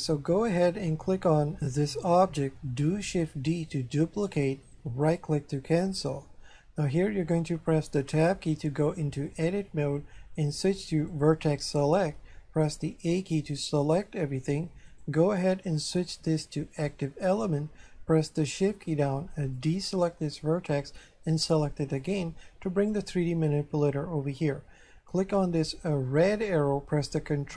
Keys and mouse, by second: 1.7 right click, 3.4 shift+d, 5.1 right click, 8.2 Tab, 11.0 click, 13.1 a, 14.9 click, 16.8 click, 19.6 shift+right click, 22.0 shift+right click, 25.9 click, 27.0 ctrl+click.